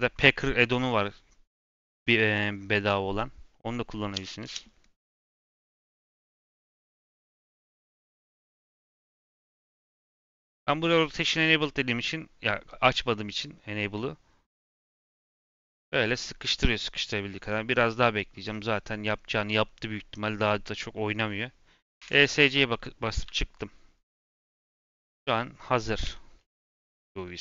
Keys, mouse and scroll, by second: 26.0 Tab, 26.3-26.8 middle drag, 26.8 ctrl+a.